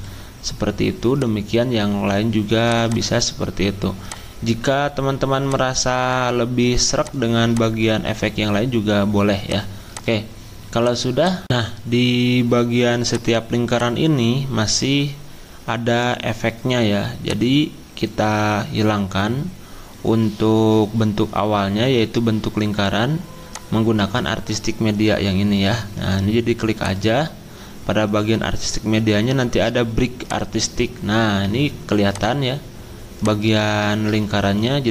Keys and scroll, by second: 33.9 ctrl+z.